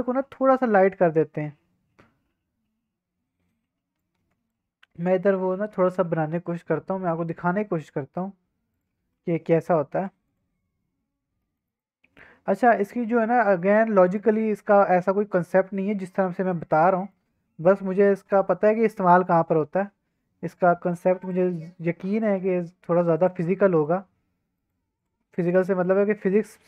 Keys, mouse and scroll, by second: 3.9 click, 5.4 middle click, 6.0 shift+middle click, 6.3 middle drag, 7.0 shift+middle drag, 7.9-8.3 scroll down 2, 8.3-8.6 scroll up 2, 8.6 x, 9.0 shift+a, 9.9 s, 10.3 click, 10.5-10.9 scroll down 2, 10.9 Tab, 11.4 middle click, 11.7 right click, 13.6 right click, 14.9 shift+middle click, 15.2 middle click, 15.8 middle click, 16.1 1, 16.5 click, 16.8 middle click, 17.6 middle click, 17.8-18.1 scroll up 2, 18.2 o, 18.5 middle click, 19.0 g, 19.1 z, 19.5-21.0 scroll down 9, 21.2 click, 22.1 click, 22.4 g, 22.5 z, 23.2 click, 23.7 middle click, 24.1 g, 24.6 click, 25.0 click, 25.4 shift+middle click, 25.8 click, 26.1 middle click, 26.4 g.